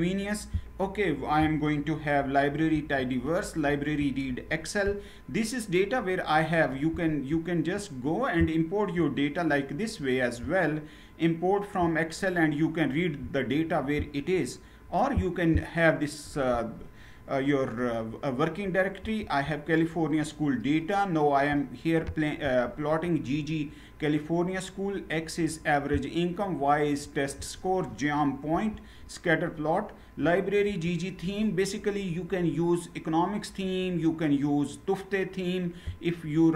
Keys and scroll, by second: 2.4 ctrl+Return, 3.6 ctrl+Return, 18.7 ctrl+Return, 28.3 ctrl+Return, 30.4 ctrl+Return.